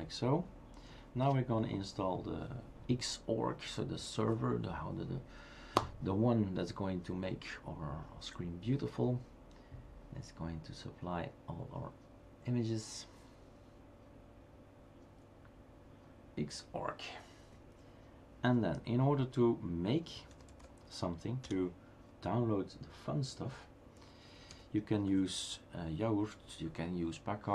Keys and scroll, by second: 1.3 Return, 20.3-21.4 typing, 24.5 typing.